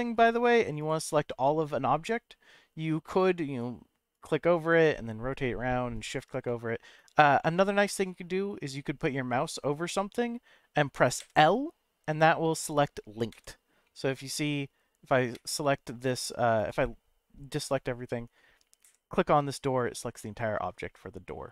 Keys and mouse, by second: 1.1 shift+middle click, 3.2 click, 4.1 click, 4.9 middle click, 5.9 shift+click, 6.4 middle click, 6.9 click, 7.4 middle click, 8.7 middle click, 11.2 l, 12.1 middle click, 13.3 l, 13.8 middle click, 14.3 click, 15.3 l, 16.2 middle click, 17.7 middle click, 18.8 l, 19.5-21.5 middle drag.